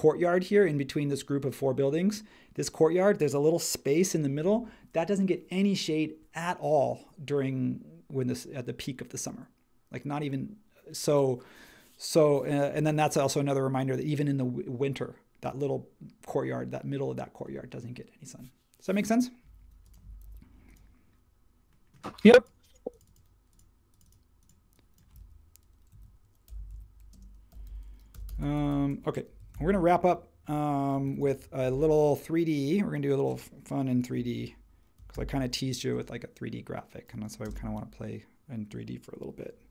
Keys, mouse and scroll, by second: 20.2 super+h, 25.9-31.5 typing, 34.1-35.1 typing, 37.4 space.